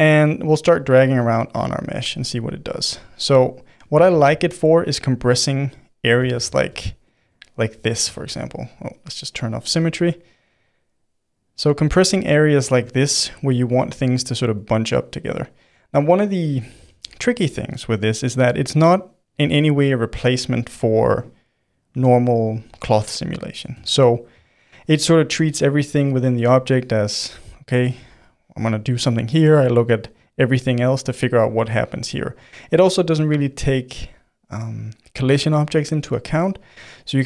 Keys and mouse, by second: 1.2 f, 1.8 middle click, 2.1 f, 3.0-4.1 drag, 4.1 ctrl+z, 4.3 middle click, 5.2 click, 5.9 middle click, 6.3 ctrl+z, 6.7 f, 7.3 click, 8.1 ctrl+z, 9.3 click, 9.9 middle click, 10.4-12.0 drag, 12.0-14.2 middle drag, 14.2-15.6 drag, 15.6-37.2 middle drag.